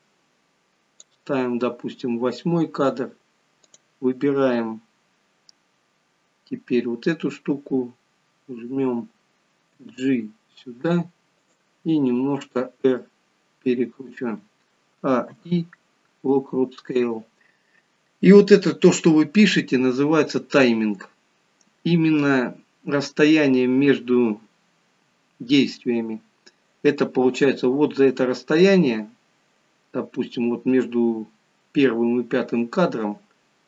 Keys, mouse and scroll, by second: 3.7 click, 9.8 g, 12.6 r, 15.0 a, 15.3 i.